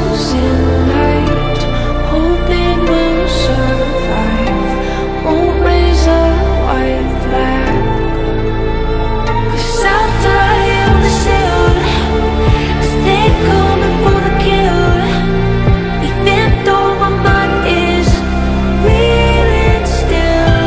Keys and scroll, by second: 0.0 shift+F2, 0.1 Escape.